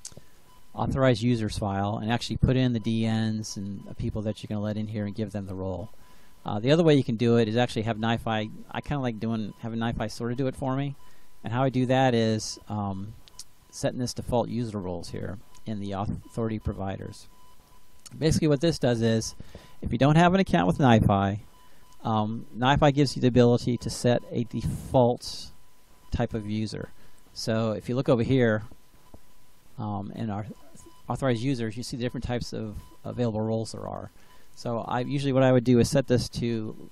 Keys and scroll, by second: 36.2 ctrl+c.